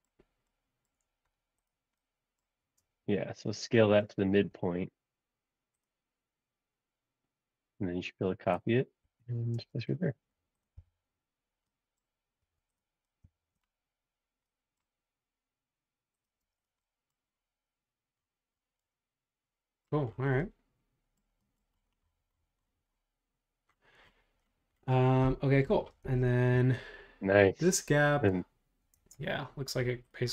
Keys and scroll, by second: 4.5 s, 9.0 Escape, 9.6 space, 10.7 m, 16.5 space, 26.1 super+Tab, 28.9 super+Tab.